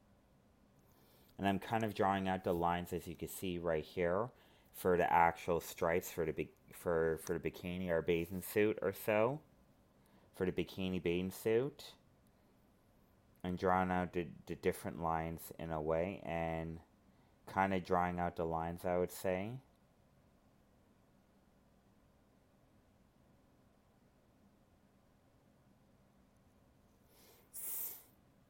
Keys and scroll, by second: 3.0 ctrl+z, 7.5 ctrl+z, 20.2 ctrl+z, 27.3 alt+space.